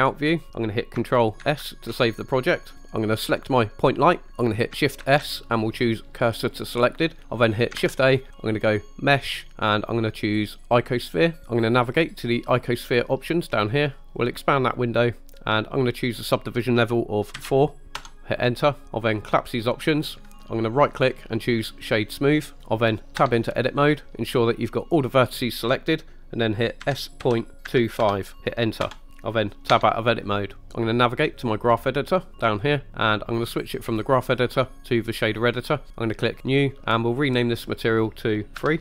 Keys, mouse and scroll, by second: 1.5 ctrl+s, 3.4 click, 5.1 shift+s, 8.0 shift+a, 14.3 click, 15.9-18.1 drag, 19.7 click, 20.8 click, 20.8 right click, 23.3 Tab, 26.9 s, 27.3 ., 27.7 2, 28.1 5, 28.9 Return, 29.8 Tab, 33.6-35.2 drag, 36.4 click, 37.7-38.8 drag.